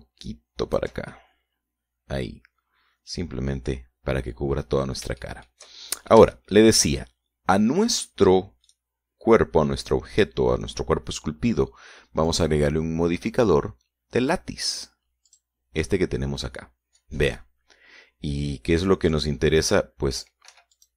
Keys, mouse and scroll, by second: 0.8-2.2 shift+drag, 2.4-7.0 shift+middle drag, 7.4 shift+middle click, 10.0 right click, 13.6 click, 16.6 click, 20.4 click.